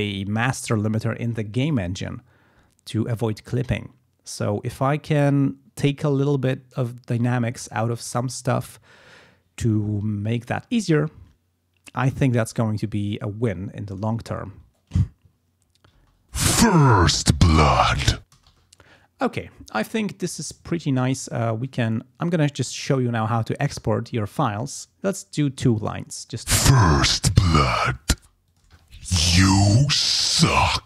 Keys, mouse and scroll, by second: 15.3 ctrl+scroll down 2, 15.6 ctrl+scroll up 2, 15.9 ctrl+space, 16.5 ctrl+scroll up 2, 18.3 space, 18.6 ctrl+scroll down 2, 26.2 click, 26.4 space, 26.6-27.0 ctrl+scroll up 2, 27.1-27.4 ctrl+scroll down 2, 28.1 space, 28.4 click, 28.8 ctrl+scroll up 2.